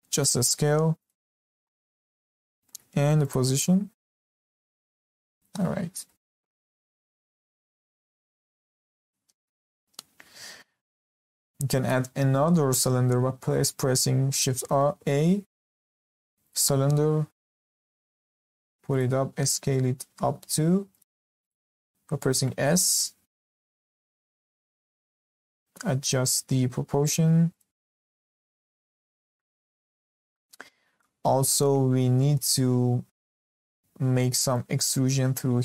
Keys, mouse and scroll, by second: 0.0 s, 1.4 scroll up 1, 1.6 shift+middle click, 2.4 g, 3.6 s, 4.8-6.0 scroll down 8, 5.3 click, 6.0-7.9 shift+middle drag, 7.9 scroll down 2, 8.2 shift+middle click, 8.7 scroll up 2, 12.0 middle click, 14.5 shift+a, 17.8 g, 19.3 a, 20.7 Escape, 20.9 click, 21.4 click, 22.1 s, 24.2 s, 27.7-28.7 scroll down 2, 28.7 scroll up 5, 29.1-29.4 shift+middle drag, 29.4 scroll up 1, 29.7-35.6 shift+middle drag.